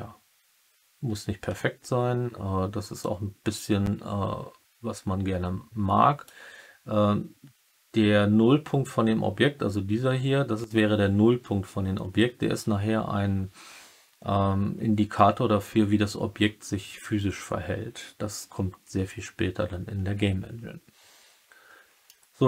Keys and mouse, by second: 2.9-6.2 drag, 22.0-22.4 middle drag.